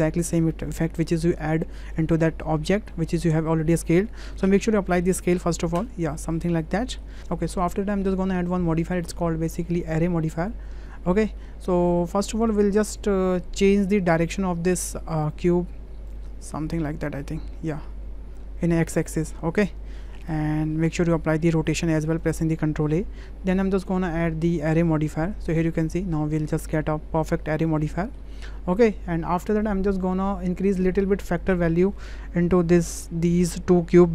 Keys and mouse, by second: 5.0 ctrl+a, 6.3-7.0 drag, 9.8-10.5 drag, 11.4-12.1 middle drag, 13.7-15.4 drag, 16.1-18.4 drag, 19.9-20.3 drag, 20.7 ctrl+a, 24.1-25.2 drag, 28.0 shift+middle click, 28.7 shift+middle click, 31.3-34.1 drag.